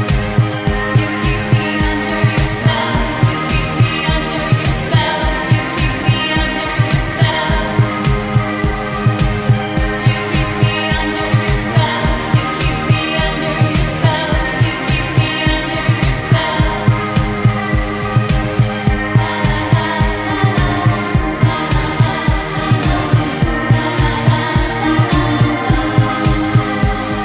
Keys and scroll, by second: 6.5 space, 11.3 space, 12.4 space, 18.3 ctrl+z, 20.4 ctrl+z, 26.1 ctrl+z.